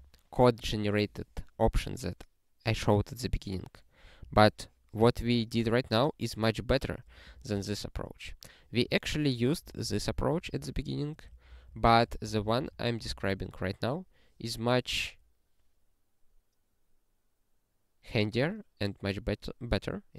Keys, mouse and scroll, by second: 7.3 ctrl+p, 9.0 ctrl+n, 9.6 ctrl+n, 9.8 ctrl+space, 10.0 ctrl+n, 10.2 ctrl+n, 10.3 ctrl+n, 10.4 ctrl+n, 10.8 ctrl+n, 11.3 ctrl+p, 14.2 ctrl+s.